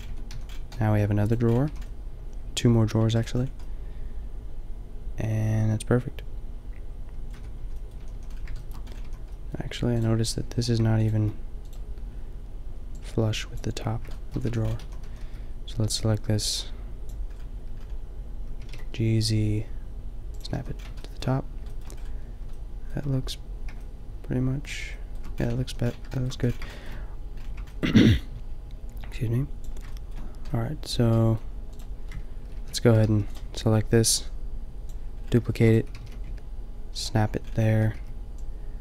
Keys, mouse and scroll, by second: 0.1 Tab, 0.3 a, 1.6 a, 4.2-5.4 middle drag, 5.6-6.3 middle drag, 7.3 middle click, 7.4 Tab, 8.0 a, 8.1 a, 9.1 a, 14.5 a, 14.8 a, 15.1 a, 15.3 b, 18.5 g, 20.6 a, 25.7 a, 26.3 a, 32.5 ctrl+l, 33.0 g, 35.6 shift+d, 36.0 g, 37.7 a, 38.0 b.